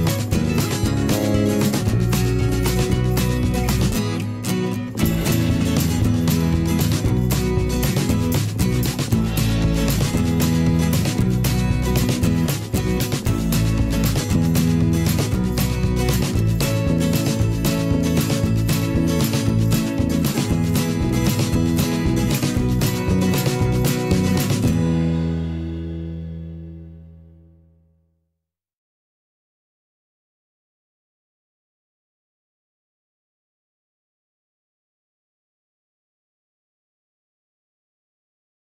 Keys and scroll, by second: 1.3 z, 1.9 v, 9.7 a, 13.7 v, 28.6 z.